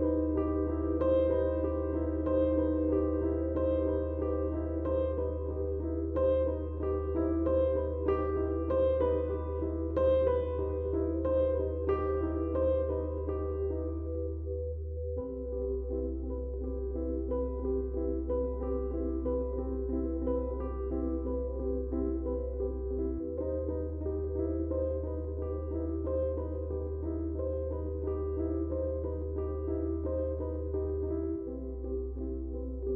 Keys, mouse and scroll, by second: 2.6 right click, 3.9 click, 6.7 click, 11.1 click, 14.6-16.2 drag, 16.4 ctrl+space, 17.2-19.2 shift+drag, 22.4 space, 22.5-27.5 drag, 27.5 ctrl+space, 27.6 ctrl+click, 27.9 ctrl+space, 28.6-32.6 drag.